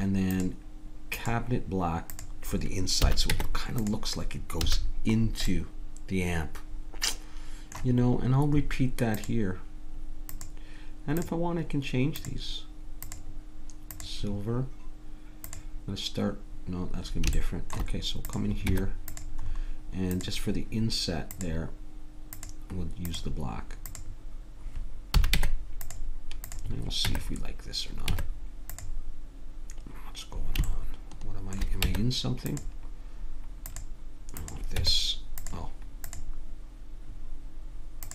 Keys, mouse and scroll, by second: 3.0 a, 3.3 Tab, 4.6 a, 12.2-14.7 drag, 15.4 click, 16.3 click, 16.6 click, 17.2 click, 17.4 middle click, 17.6 middle click, 18.3-25.7 drag, 18.7 Tab, 25.2 a, 25.4 Tab, 26.5-28.2 drag, 27.1 Tab, 28.1 Tab, 31.9 Tab, 33.7-36.0 drag, 34.8 Tab, 37.1 click.